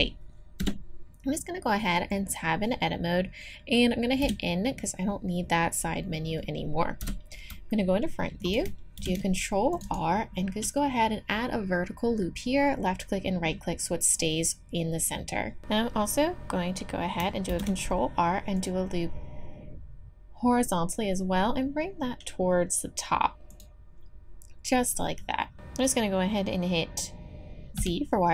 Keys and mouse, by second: 0.6 Tab, 4.2 n, 7.0 KP_1, 9.0 ctrl+r, 17.5 ctrl+r, 27.8 z.